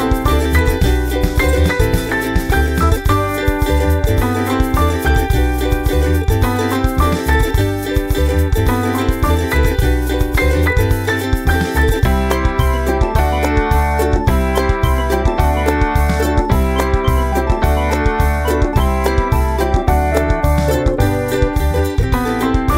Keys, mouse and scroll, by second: 6.4-7.1 ctrl+scroll up 6, 7.7 scroll up 2, 8.3-12.7 scroll up 2, 12.9 ctrl+scroll up 2, 13.4-15.7 drag, 15.9-18.4 drag, 18.9 click, 19.4-20.5 drag, 20.5-22.7 drag.